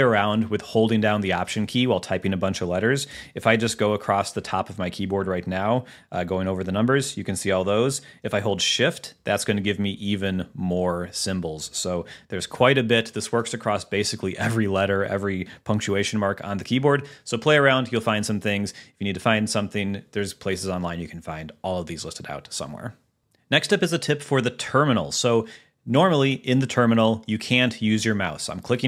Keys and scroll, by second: 0.7 Down, 1.7 Return, 3.8 alt+1, 4.3 alt+2, 4.6 alt+3, 5.0 alt+4, 5.3 alt+5, 5.7 alt+6, 6.2 alt+7, 6.6 alt+8, 6.9 alt+9, 7.2 alt+0, 8.9 alt+shift+1, 9.5 alt+shift+2, 9.8 alt+shift+3, 10.6 alt+shift+5, 11.0 alt+shift+6, 11.3 alt+shift+7, 11.9 alt+shift+8, 12.3 alt+shift+(, 12.7 alt+shift+).